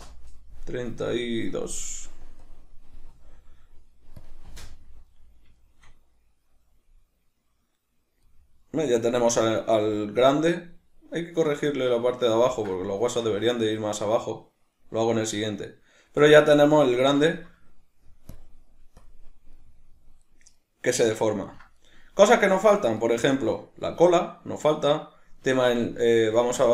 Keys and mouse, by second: 4.2 drag, 4.5 space, 5.5-12.7 shift+middle drag, 15.1 middle click, 16.2 middle click, 17.2-18.3 shift+middle drag, 18.3 drag, 21.4-26.7 ctrl+middle drag.